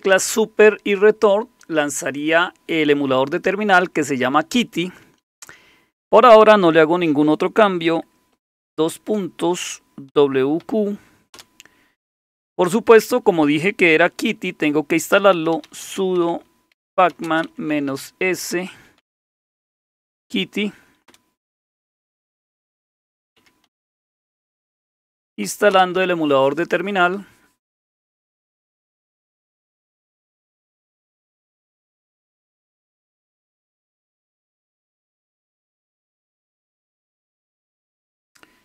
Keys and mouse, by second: 7.9 Escape, 8.0 Escape, 8.9 typing, 10.1-10.6 typing, 11.3 Return, 15.0-20.5 typing, 21.1 Return, 22.4-26.2 typing, 29.3 Return.